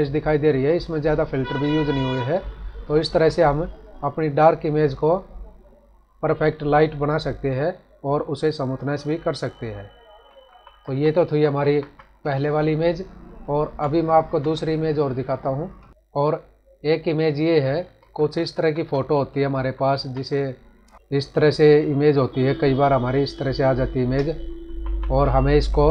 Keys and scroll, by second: 2.9 ctrl+-, 10.4 ctrl+-, 11.2 ctrl+=, 13.6 ctrl+-, 18.0 ctrl+=, 19.5 ctrl+-, 20.9 space, 24.6 ctrl+-.